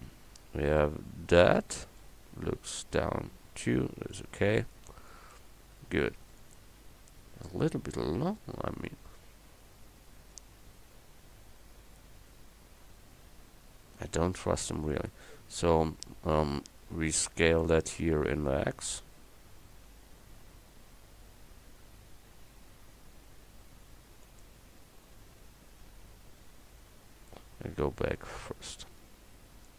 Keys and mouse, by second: 8.3 KP_7, 17.7 s, 27.4 ctrl+z, 28.2 middle click.